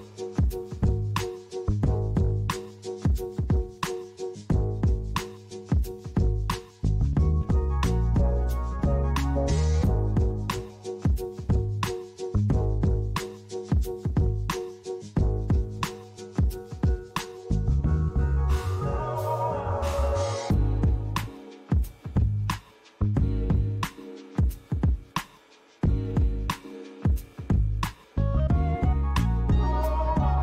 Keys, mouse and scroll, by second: 3.4 click, 4.3 click, 4.6 click, 8.6 shift+d, 9.9 y, 11.5 click, 12.7 click, 12.9 click, 14.9 l, 21.2 shift+d, 22.5 y, 24.0 click, 25.2 click, 25.4 click, 29.7 click.